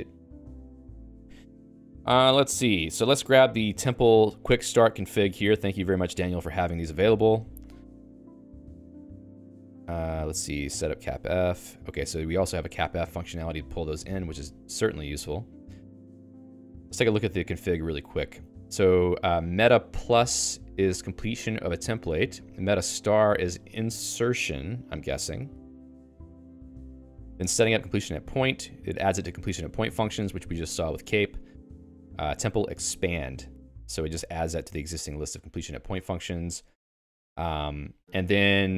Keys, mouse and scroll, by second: 12.9 shift+g, 15.1-23.9 typing, 26.2-29.7 typing, 31.5-38.7 typing.